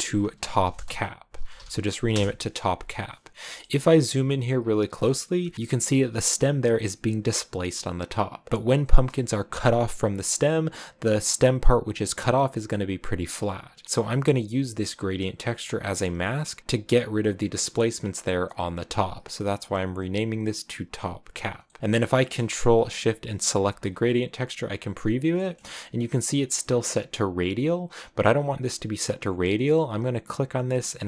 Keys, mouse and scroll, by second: 3.4 shift+middle click, 3.6 scroll up 5, 4.2 shift+middle click, 4.5 scroll up 1, 5.4 shift+middle click, 8.5 scroll up 6, 8.5 scroll down 3, 9.8 scroll up 2, 13.8 click, 14.9 click, 19.5 click, 22.8-23.9 drag, 23.9-24.9 scroll down 6, 25.2 shift+middle click, 25.4-25.7 scroll up 4, 30.0-30.4 scroll up 1.